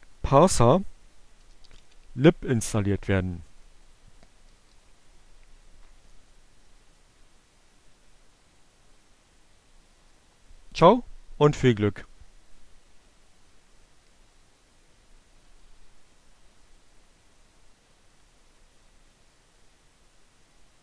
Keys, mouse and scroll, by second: 1.1-2.0 typing, 4.0 Right, 19.3 Return.